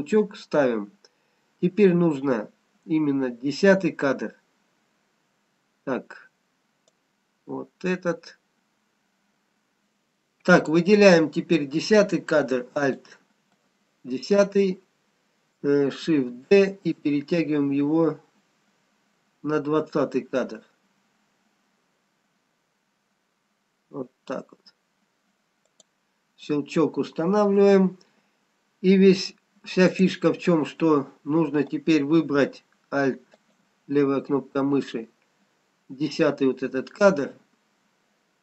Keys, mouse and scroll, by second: 7.0 click, 11.0 click, 13.1 alt+click, 16.4 shift+d, 28.7-29.3 scroll up 1, 29.9 click, 33.5 alt+click.